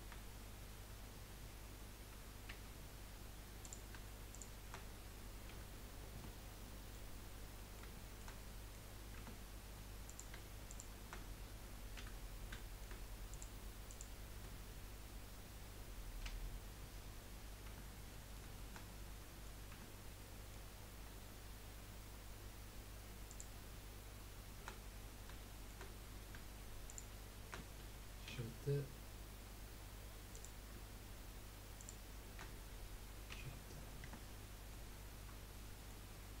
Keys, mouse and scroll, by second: 2.5 j, 3.6 click, 4.3 shift+click, 5.5 j, 6.1 Tab, 6.6-7.2 middle drag, 7.2-7.5 scroll down 3, 7.5-8.9 middle drag, 8.9-9.2 scroll up 2, 9.2 Tab, 10.1 click, 10.7 shift+click, 11.9 j, 12.5 shift+middle click, 13.3 click, 13.9 shift+click, 16.2 j, 17.2-17.6 scroll down 2, 17.6 Tab, 18.1-19.7 middle drag, 19.7 Tab, 20.2 middle click, 20.8 scroll up 1, 22.1 scroll up 1, 23.3 click, 25.0-25.4 scroll down 2, 25.4 shift+middle click, 25.9 scroll up 1, 26.9 shift+click, 28.3 j, 30.3 click, 33.3 j, 34.0 Tab, 34.4-34.7 scroll down 2, 34.7-36.4 middle drag.